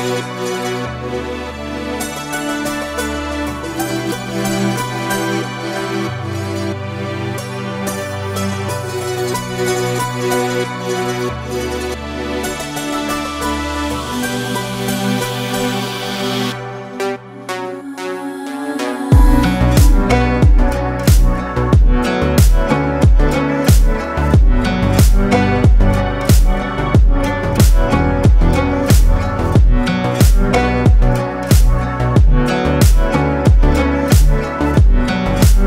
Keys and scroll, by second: 4.1 Delete, 4.6 space, 10.1 ctrl+space, 12.0 ctrl+space, 12.7 ctrl+space, 16.2 ctrl+space, 25.8 ctrl+space, 26.8 ctrl+space, 27.4 ctrl+space.